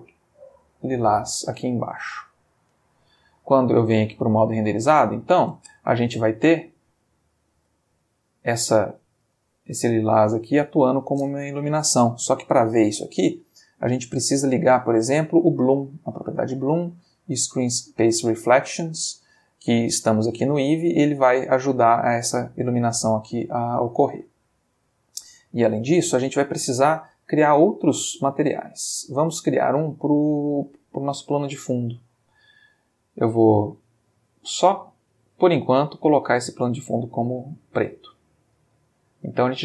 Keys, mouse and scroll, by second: 2.4 click, 4.2 click, 5.1-5.6 ctrl+middle drag, 5.7 ctrl+space, 7.6 space, 9.3 space, 10.4 space, 13.2 click, 15.5 click, 17.3 click, 23.6-24.4 drag, 31.6 click, 33.8 click, 35.7 click, 36.6-38.0 drag, 38.4-39.4 ctrl+middle drag, 39.5-39.6 ctrl+shift+middle drag.